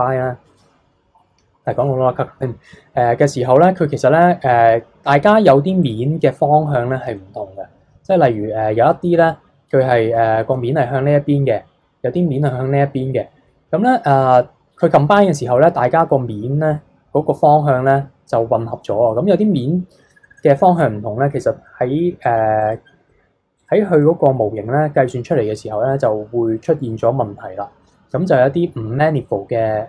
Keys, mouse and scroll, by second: 4.5-5.8 middle drag, 5.8 click, 7.1-7.7 middle drag, 7.7-8.9 scroll up 2, 9.9-10.2 middle drag, 10.2-13.4 scroll down 3, 13.8-17.0 middle drag, 22.6 click, 23.5 click, 24.0-27.1 middle drag.